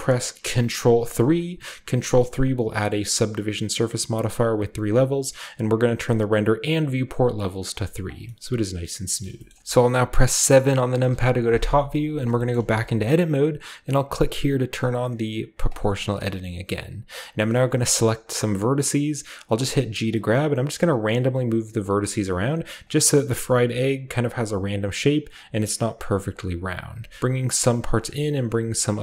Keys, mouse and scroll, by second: 1.0 ctrl+3, 2.4 ctrl+click, 6.0 click, 7.7 click, 8.2-9.3 middle drag, 9.1-9.6 shift+drag, 9.4-10.9 shift+middle drag, 10.9 KP_7, 12.5-14.8 shift+middle drag, 15.6 click, 17.5-18.6 right drag, 18.6 g, 19.1 scroll down 1, 19.4 click, 19.9 middle click, 20.0-29.0 typing, 20.2 click, 20.7 click, 21.0 click, 21.5 click, 21.7 click, 22.3 click, 22.8 click, 23.2 click, 23.5 click, 24.3 click, 27.1 click, 27.6-29.0 scroll up 1, 27.9-29.0 drag.